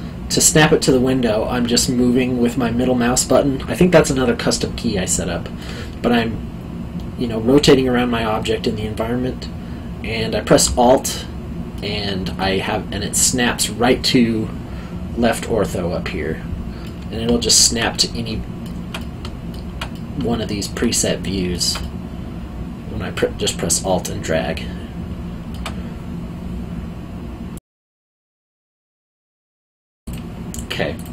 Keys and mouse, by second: 6.1 middle click, 10.6 alt+middle click, 16.8 middle click, 27.5 click, 30.0 click.